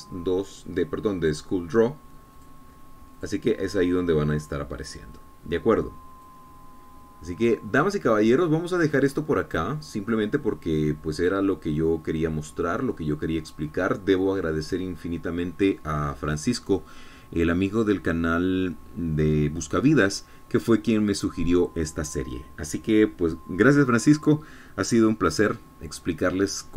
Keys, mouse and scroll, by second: 3.8 click, 4.7 click, 5.8 click, 7.7-11.8 drag, 12.0-15.4 middle drag, 15.7 middle click.